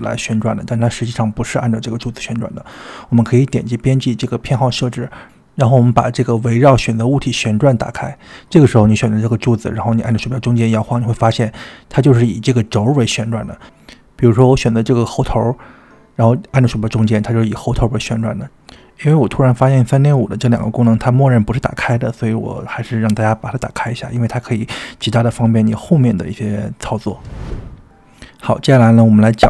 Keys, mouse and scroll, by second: 0.7-1.5 middle drag, 3.4-4.8 drag, 8.0 click, 8.7 click, 9.6-13.0 middle drag, 13.4-14.1 shift+middle drag, 14.6-15.8 middle drag, 15.8 click, 16.6-27.5 middle drag.